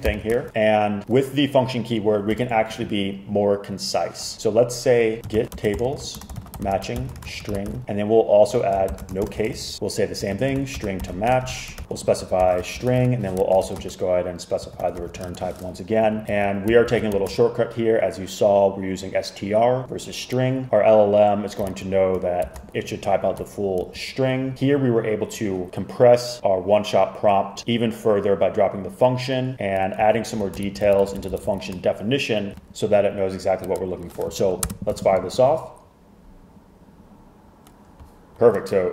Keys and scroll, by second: 0.1 super+k, 5.0-17.5 typing, 21.8 super+Right, 22.5 shift+super+Left, 23.9 Right, 30.2 alt+Right, 30.7 shift+Left, 30.9 shift+Left, 31.1 shift+Left, 34.8 Return.